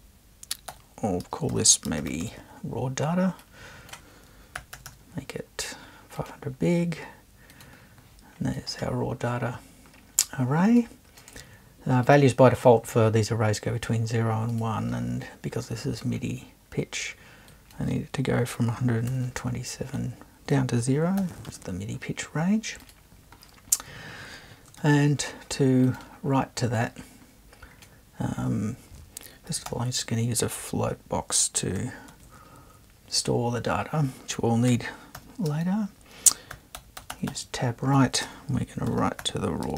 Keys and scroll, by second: 0.7-2.7 typing, 4.3-5.2 typing, 18.5 2, 19.1 7, 21.2 0, 24.8 super+1, 29.7 f, 32.1 super+1, 34.4-39.7 typing.